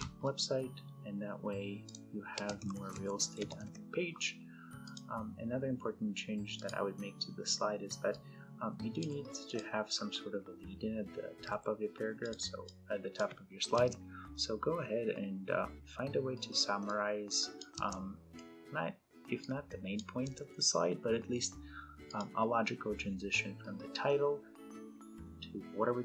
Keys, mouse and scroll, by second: 1.6 click, 2.0-3.8 typing, 4.6 click, 7.8-8.8 ctrl+drag, 11.1 ctrl+a, 12.0 click, 13.5 BackSpace, 16.6-17.6 click, 17.6 BackSpace, 19.4-20.0 click, 20.1 BackSpace, 21.9 click.